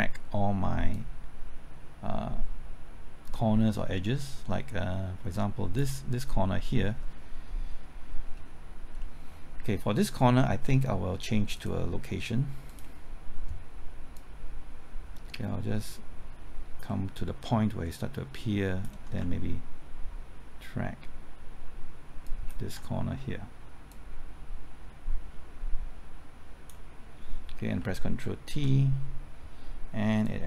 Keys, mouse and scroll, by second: 0.9-6.3 drag, 8.2 scroll up 1, 9.0 middle click, 11.6 click, 14.2-19.2 drag, 22.3 ctrl+click, 23.9-27.3 drag, 28.5 ctrl+t, 30.2-30.4 drag.